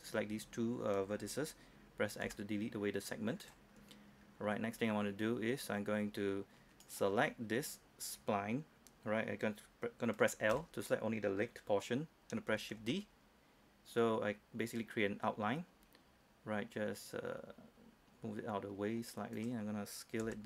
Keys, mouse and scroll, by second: 2.3 x, 3.5 click, 4.2 scroll up 1, 4.3-6.9 scroll down 1, 6.9 right click, 10.6 l, 12.9 shift+d, 19.4 click, 20.3 s.